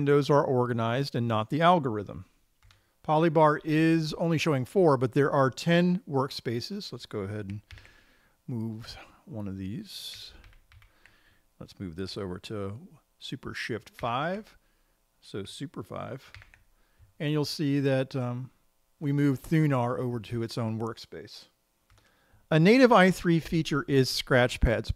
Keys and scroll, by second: 8.2 super+t, 11.0 super+Left, 14.6 shift+super+5, 16.8 super+5.